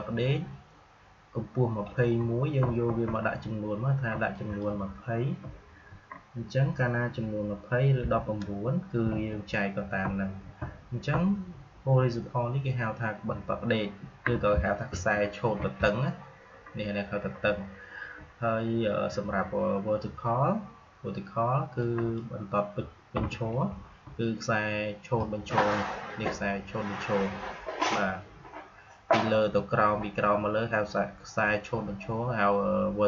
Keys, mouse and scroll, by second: 4.2 click, 21.7-33.0 drag.